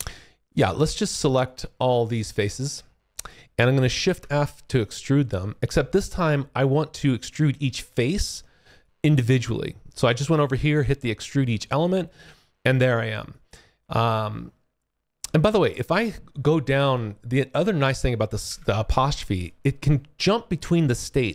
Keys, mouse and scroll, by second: 0.4 click, 1.4 alt+click, 4.0 shift+f, 4.1 click, 7.4 click, 8.8 alt+click, 11.7 alt+middle click, 12.3 alt+click, 13.2 click, 16.7 `, 16.9 `, 18.4 `, 19.3 click.